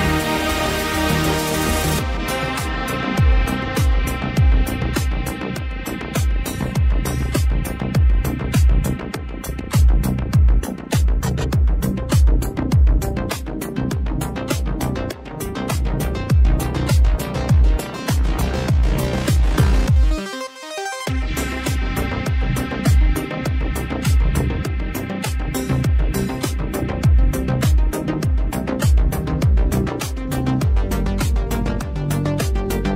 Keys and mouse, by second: 0.1 ctrl+z, 1.9 ctrl+z, 2.2 ctrl+z, 2.4 ctrl+z, 2.8 ctrl+z, 6.3 ctrl+z, 6.6 ctrl+z, 6.8 ctrl+z, 6.9 ctrl+z, 8.4 ctrl+z, 8.7 ctrl+z, 9.0 ctrl+z, 11.7 ctrl+z, 12.2 ctrl+z, 17.9 ctrl+z, 22.9 ctrl+z, 25.7 ctrl+z, 26.0 ctrl+z, 26.2 ctrl+z, 26.4 ctrl+z, 26.8 ctrl+z, 27.0 ctrl+z, 27.3 ctrl+z, 27.5 ctrl+z, 27.8 ctrl+z, 27.9 ctrl+z, 28.2 ctrl+z, 29.1 ctrl+z, 31.9 ctrl+z, 32.4 ctrl+z, 32.8 ctrl+z.